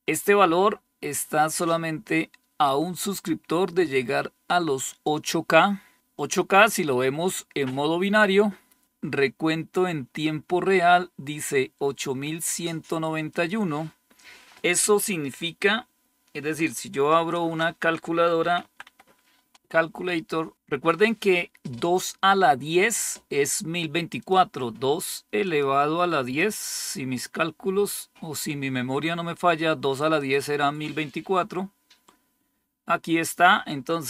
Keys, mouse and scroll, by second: 2.5-4.9 drag, 5.4 click, 13.2 click, 16.9 alt+super+d, 18.1-19.5 typing, 20.5 super+t, 24.1 click, 25.3 click, 25.8 click, 26.3 click, 26.7 click, 30.0 click, 30.3 click.